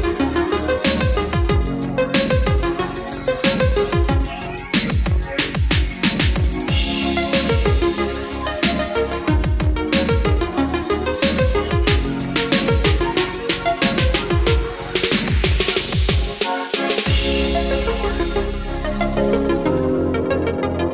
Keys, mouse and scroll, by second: 3.0-10.4 drag, 13.6 Delete, 14.6-20.9 drag.